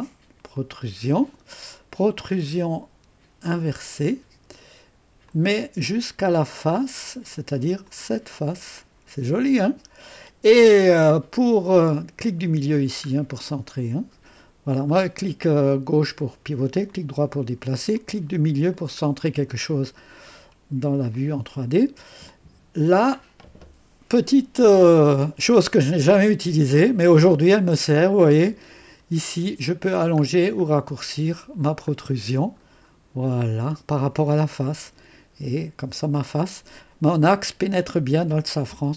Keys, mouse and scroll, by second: 0.5 click, 3.8 click, 5.2 click, 6.5 click, 7.8 click, 8.8-10.3 drag, 12.7 middle click, 13.5-14.9 drag, 15.7-16.9 drag, 18.0 click, 18.7 middle click, 19.3-20.5 drag, 20.5-21.2 scroll up 2, 22.3-23.5 drag, 28.9-29.8 scroll up 2, 29.8-30.6 scroll down 2, 30.6 scroll down 1, 31.2-32.0 scroll down 2, 32.0-33.9 scroll up 2, 33.9-36.7 drag.